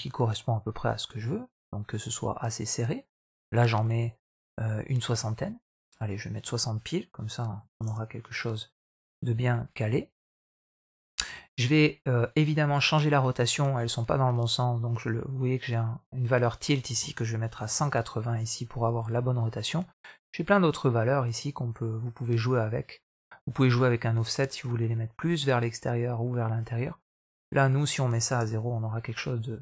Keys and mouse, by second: 6.0-7.9 drag, 8.4 middle click, 9.0-11.1 middle drag, 13.2-15.6 drag, 16.2-17.8 drag, 18.3 middle click, 18.8-19.2 middle drag, 21.2-21.8 middle drag, 23.0 middle click, 24.2-27.0 drag, 27.4-28.4 drag, 28.8 middle click, 29.5 middle click.